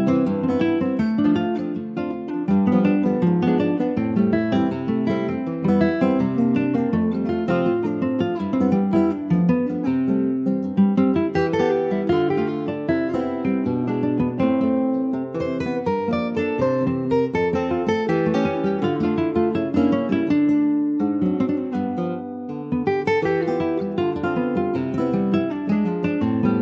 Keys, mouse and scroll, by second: 0.5 click, 2.9 s, 6.5-7.3 scroll up 1, 7.3 alt+z, 7.7-8.2 scroll up 2, 8.2 shift+middle click, 8.5-9.3 shift+scroll up 3, 9.3-10.3 shift+middle drag, 10.3-10.8 scroll up 3, 10.8-14.0 shift+middle drag, 14.0 scroll down 2, 14.3-15.5 shift+middle drag, 15.5 click, 18.4 shift+middle click, 19.1-19.7 shift+scroll up 2, 19.9 shift+middle click, 20.4-20.9 scroll down 2, 20.9 Tab, 21.1-21.4 scroll down 2, 22.4 click, 24.2-25.1 scroll up 7, 25.1 shift+middle click, 25.3-25.6 shift+scroll up 3, 26.0-26.6 shift+middle drag.